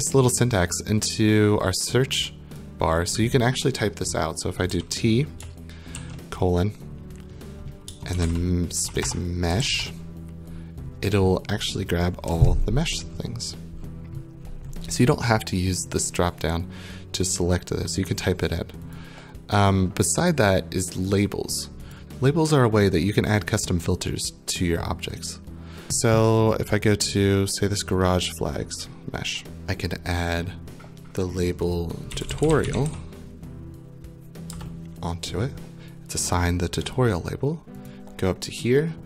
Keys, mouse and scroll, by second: 2.5 click, 4.7-6.4 typing, 7.6-10.2 typing, 12.1-14.9 scroll, 16.0 click, 16.0 scroll, 19.0 click, 21.1 click, 21.9 click, 25.8 click, 25.8-27.1 scroll down 15, 27.1 click, 29.0 scroll, 29.6 click, 30.4 click, 31.8-33.4 typing, 34.5 Return, 37.9 click.